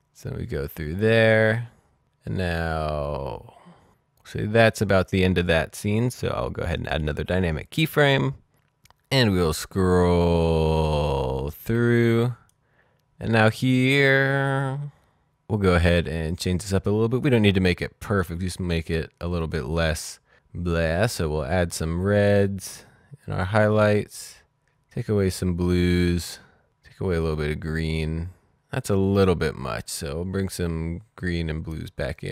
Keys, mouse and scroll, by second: 6.2 right click, 6.9 click, 9.2 click, 13.3 click, 17.9 click, 21.5-23.9 scroll up 1, 23.9-26.1 scroll down 1, 26.1-26.6 scroll up 1, 26.6-27.1 scroll down 1, 27.1-27.9 scroll down 1, 27.9-30.2 scroll up 1, 30.2-31.1 scroll down 1, 31.2-32.3 scroll up 1.